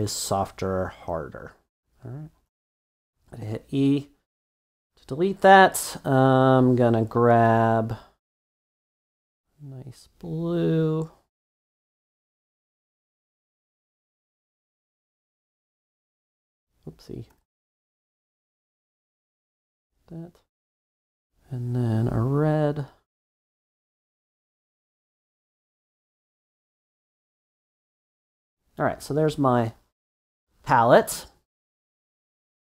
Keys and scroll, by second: 2.8 e, 4.6 super+d, 15.7 b, 17.3 super+z, 18.5 [, 18.6 [.